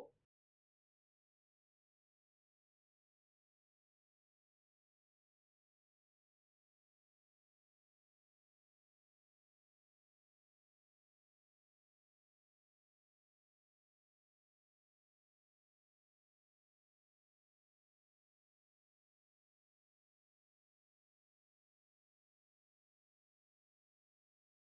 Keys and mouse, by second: 1.7 e, 4.3 click, 4.8 shift+click, 5.7 e, 6.4 e, 7.5 e, 8.3 e, 9.3 e, 10.2 shift+middle click, 11.5 e, 12.6 shift+middle click, 13.1 e, 14.1 e, 15.3 shift+middle click, 15.7 click, 17.0 click, 17.9 shift+click, 18.4 click, 18.9 click, 19.7 click, 20.8 click, 21.8-22.9 drag, 23.4 click, 23.7 shift+click.